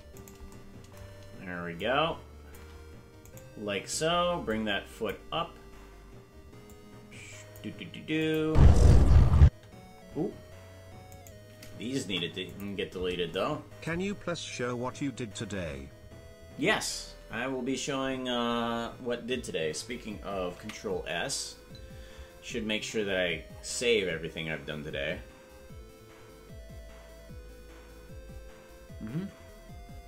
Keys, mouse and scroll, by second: 0.2 right click, 1.7 shift+click, 3.3 right click, 4.5 click, 6.6 click, 8.2 click, 8.4 space, 11.0 right click, 12.0 Delete, 14.4 scroll down 1, 23.1 ctrl+s.